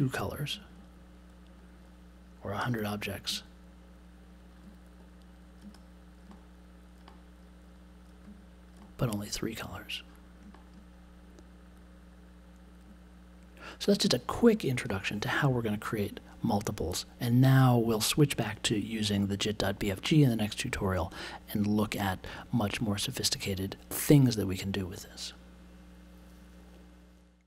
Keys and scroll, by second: 2.6 3.